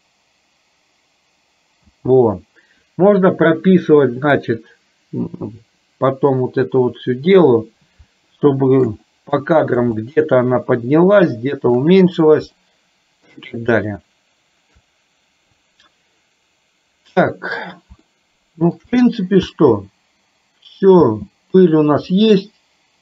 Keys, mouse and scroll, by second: 1.8 space, 8.5 shift+middle click, 9.1 middle click, 10.1-12.0 shift+middle drag, 12.6 shift+middle click, 14.0 shift+middle click, 18.1 shift+middle click, 19.5 space, 21.2 space, 22.2-23.0 middle drag.